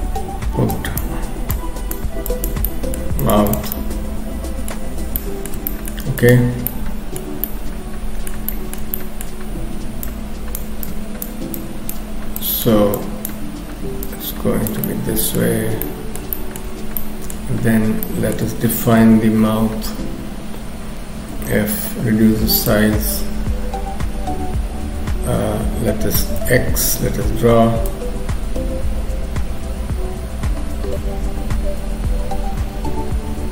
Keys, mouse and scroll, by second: 0.7 click, 1.6 click, 2.7 middle click, 3.2 shift+click, 3.5 shift+click, 3.7 middle click, 4.9 scroll down 2, 5.2 middle click, 5.7 shift+middle click, 6.2 shift+click, 6.7 shift+middle click, 7.5 middle click, 8.5 shift+middle click, 8.9 middle click, 9.3-9.7 scroll up 2, 10.1 click, 10.1 scroll up 1, 10.9 click, 11.6 click, 12.4 click, 13.0 click, 14.9 middle click, 15.6-16.2 scroll down 2, 15.8 middle click, 16.3 shift+middle click, 17.0 middle click, 18.1 shift+middle click, 19.1 KP_3, 19.5-20.1 scroll up 2, 21.2 f, 26.4 x, 27.3-27.9 scroll up 1, 27.9 click.